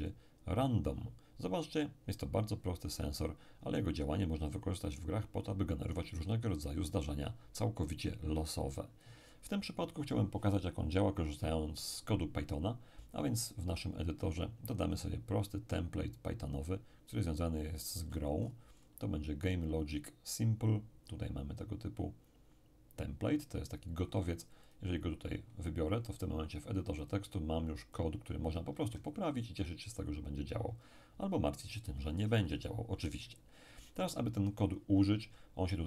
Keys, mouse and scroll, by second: 0.0 click, 6.2-7.7 scroll down 2, 14.8 click, 17.7-18.8 scroll up 2, 18.8-19.8 scroll up 1, 24.6 click, 27.0-29.0 drag, 29.0-30.0 ctrl+scroll up 1, 30.0-31.0 ctrl+scroll down 1.